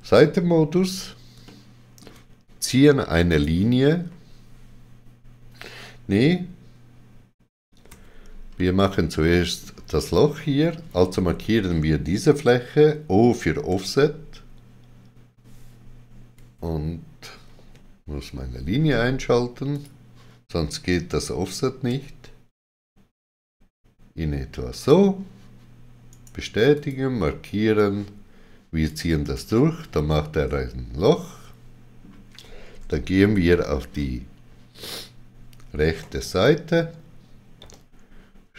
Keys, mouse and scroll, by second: 0.8 right click, 1.4 shift+middle click, 3.2 click, 8.5 shift+middle click, 13.7 middle click, 13.7 click, 13.7 o, 17.5 middle click, 17.5 click, 17.5 o, 19.7 click, 21.8 o, 24.7 click, 24.7 o, 26.0 right click, 26.7 click, 27.7 click, 29.2 right click, 29.8 middle click, 36.0 alt+z, 36.1 alt+z, 37.6 alt+z.